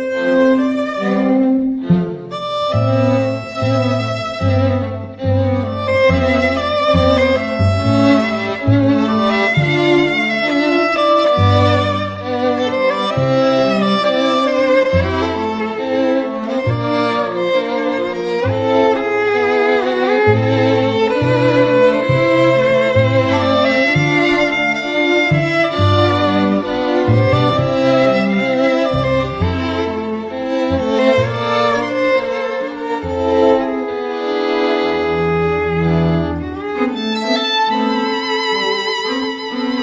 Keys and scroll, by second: 27.6 t.